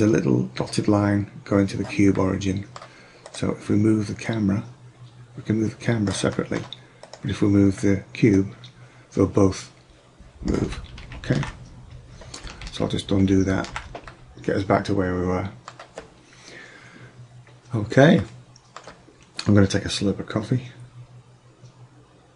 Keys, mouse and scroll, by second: 2.3-3.2 middle drag, 8.6-10.3 drag, 11.1 ctrl+z, 12.7 ctrl+z, 13.2 ctrl+z, 14.2 middle drag, 14.8 middle click, 18.6 middle click.